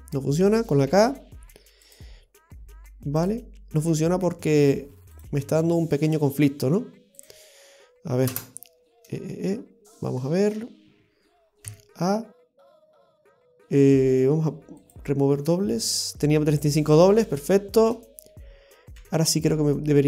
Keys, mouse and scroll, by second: 0.9 k, 9.9 middle click, 10.3-11.0 scroll up 1, 11.0-11.7 scroll down 4, 11.7 a, 12.3-12.6 scroll down 1, 12.6 middle click, 13.2 w, 16.7-17.1 scroll up 1, 17.3 scroll up 2, 17.4 shift+middle click, 19.0 k.